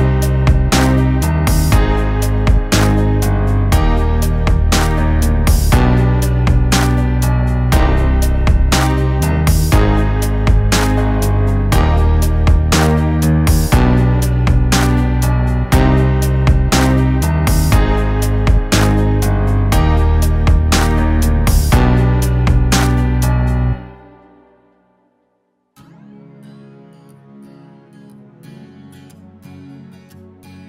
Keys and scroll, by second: 3.8 ctrl+=, 13.3 ctrl+[, 13.4 ctrl+[, 18.9 ctrl+], 22.8 ctrl+[, 23.6 ctrl+], 24.2 ctrl+], 27.2 1, 27.6 Return.